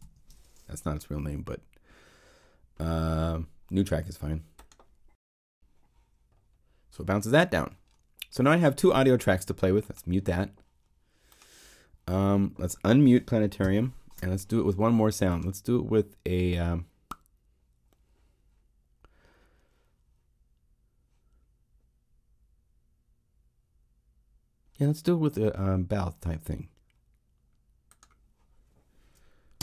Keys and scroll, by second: 0.0-0.4 typing, 13.5 ctrl+m, 29.5 Home.